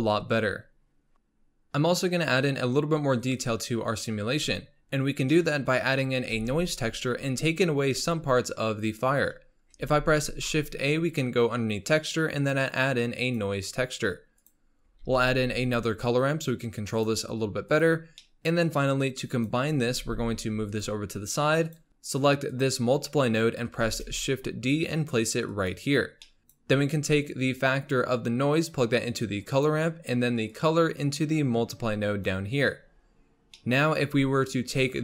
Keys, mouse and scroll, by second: 1.1 x, 2.1 click, 3.7-4.3 scroll down 1, 4.3-4.8 scroll up 3, 4.8-5.3 scroll down 2, 5.3-6.3 middle drag, 6.3 shift+a, 9.8 shift+a, 15.0 shift+a, 18.2 middle click, 19.0 click, 19.8 scroll down 2, 20.0 g, 21.6 click, 22.5 click, 23.8 shift+d, 26.3 middle click, 26.4-31.0 drag, 33.0-33.6 scroll up 4, 33.6 middle click, 33.9-35.0 scroll up 6.